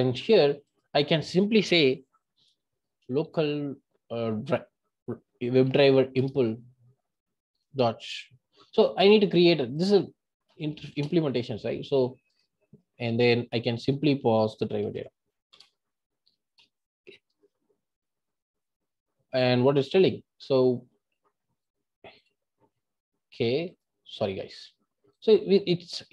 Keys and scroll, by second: 22.0 super+b.